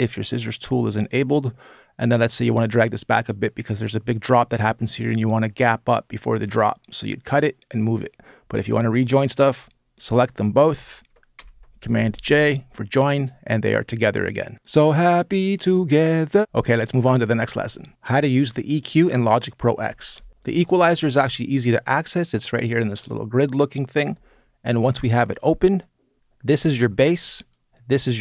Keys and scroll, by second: 11.1 super+j.